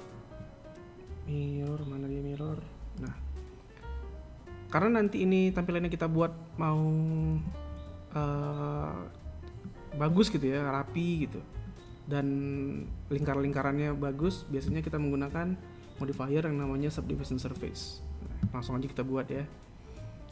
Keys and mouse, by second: 0.2-3.3 drag, 8.3 z, 16.8-20.3 drag.